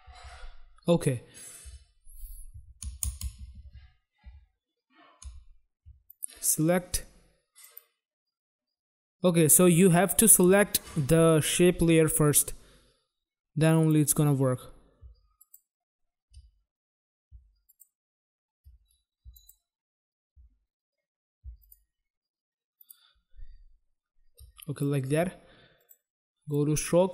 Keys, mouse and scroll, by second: 0.2 ctrl+z, 1.6 ctrl+z, 6.1 click, 7.6 click, 13.7 click, 15.3 shift+click, 17.6 shift+click, 19.3 shift+click, 21.6 shift+click, 24.7 click, 25.7 click, 26.4 click.